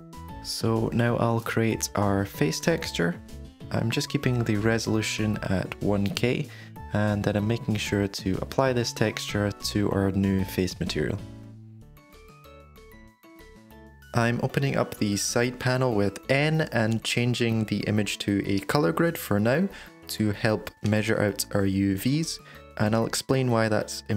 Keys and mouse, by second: 1.4-6.1 drag, 12.5 click, 14.9-15.3 middle drag, 17.1 n, 18.9 n, 20.0 shift+middle click, 20.8 middle click, 21.7 Tab, 23.0 shift+middle click, 23.9 shift+middle click.